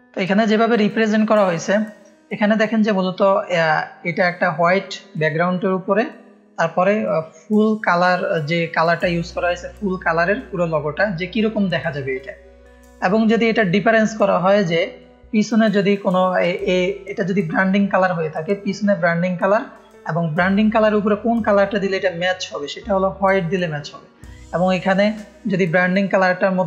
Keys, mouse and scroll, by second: 12.7 click.